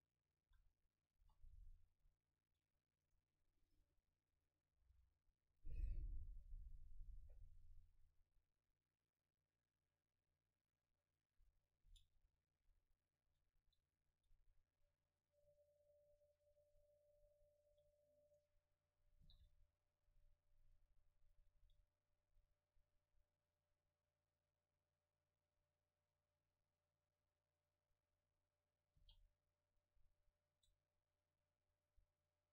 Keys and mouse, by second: 0.8 a, 1.2 KP_0, 3.1-5.5 right drag, 5.5-8.5 drag, 9.3-10.9 drag, 12.8 a, 13.4 l, 15.2-17.2 drag, 15.7 Tab, 17.2-18.4 middle drag, 17.7 a, 18.4-20.0 right drag, 19.3 g, 20.7-22.4 drag, 20.7 Tab, 21.6 a, 23.5-26.5 drag, 29.0 l, 30.2-32.5 drag, 30.6 Tab.